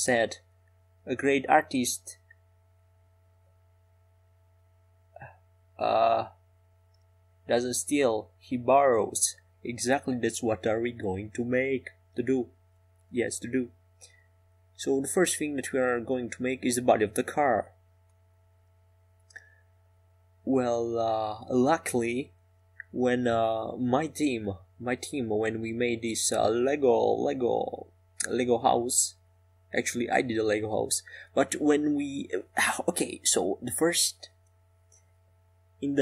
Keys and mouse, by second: 13.8 Tab, 23.0 ctrl+r, 28.5-31.2 right drag, 29.4-31.2 drag, 32.8-34.7 right drag, 34.7 click.